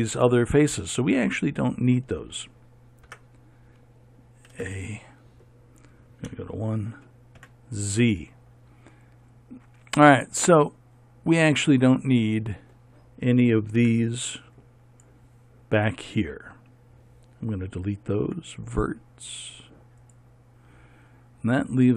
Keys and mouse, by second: 3.6 Tab, 5.1 a, 6.8 KP_1, 7.9 z, 14.4 b, 18.8 x.